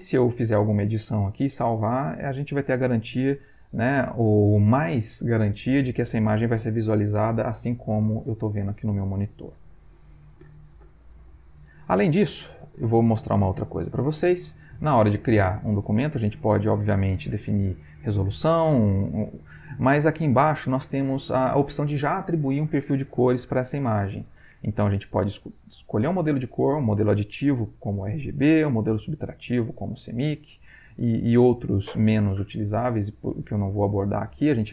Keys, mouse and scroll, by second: 11.4 click, 14.1 click, 28.2-30.3 drag, 31.0-34.7 drag.